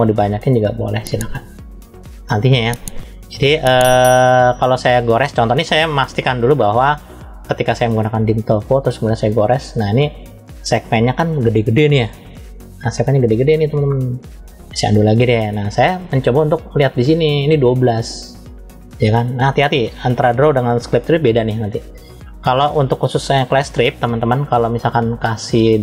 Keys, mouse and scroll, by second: 7.3 click, 9.0 click, 13.9 click, 16.5-19.3 drag, 24.3-25.8 drag.